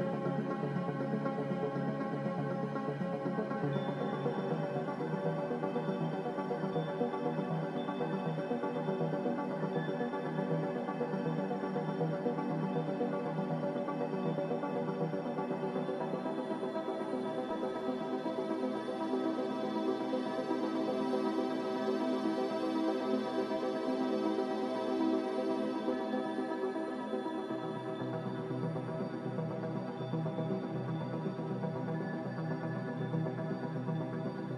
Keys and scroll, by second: 0.0 z, 3.3 5, 3.3 0, 3.6 Return, 6.3 typing, 9.6 typing, 10.1 Return.